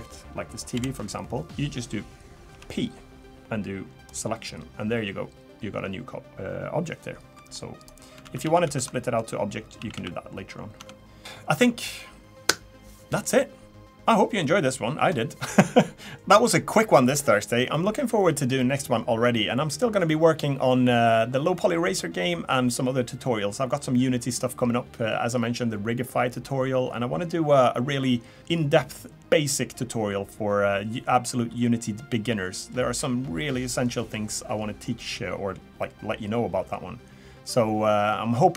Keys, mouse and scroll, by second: 0.7 l, 1.5 shift+p, 2.5 p, 7.3 middle click, 7.8 click, 8.2 ctrl+z, 8.4 ctrl+z, 8.6 ctrl+z, 9.0 middle click, 9.6 scroll down 1, 9.8 a, 9.9 a, 10.8 Tab.